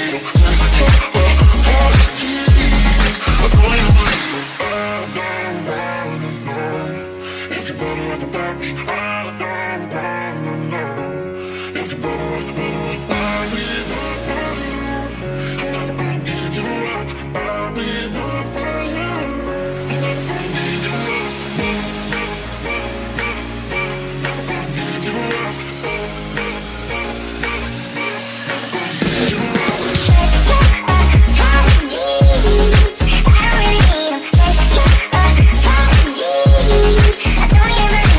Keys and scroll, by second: 0.0-2.5 typing, 5.2 a, 6.5-7.6 typing, 10.0 q, 10.5 q, 11.0 d, 12.8 a, 20.7-22.6 typing, 29.5-31.3 typing, 32.5-34.1 typing, 35.9 a, 37.1-38.1 typing.